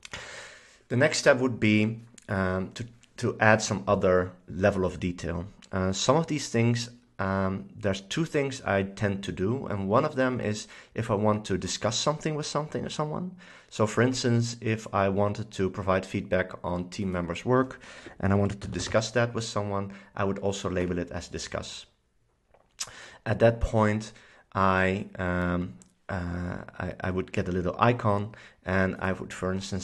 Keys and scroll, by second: 18.2-19.6 typing, 20.9 Return.